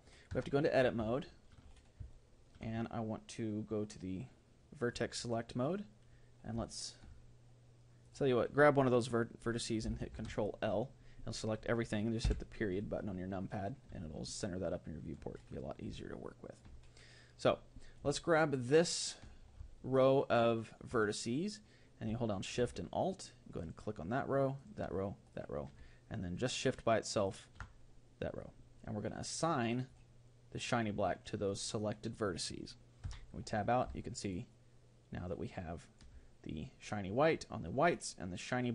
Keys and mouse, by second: 0.3 Tab, 1.2-4.3 middle drag, 4.8-6.7 drag, 6.6-9.8 middle drag, 8.0-10.1 right drag, 10.1 ctrl+l, 12.2 KP_Decimal, 14.0-15.8 middle drag, 16.0-17.8 middle drag, 18.6-20.5 right drag, 19.8-22.0 middle drag, 23.6-30.0 right drag, 30.0-31.6 drag, 33.0 Tab, 34.0 middle click, 34.2-36.1 middle drag.